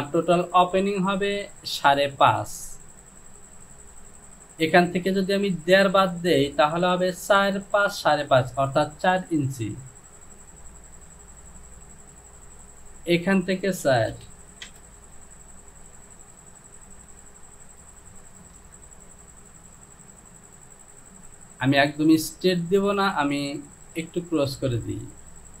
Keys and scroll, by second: 14.7 Return.